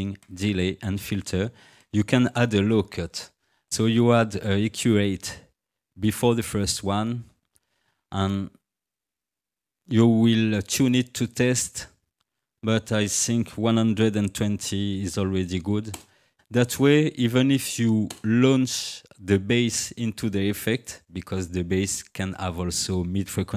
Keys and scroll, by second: 14.0 1, 14.4 2, 15.0 0, 16.0 Return, 16.3 0, 18.1 Return.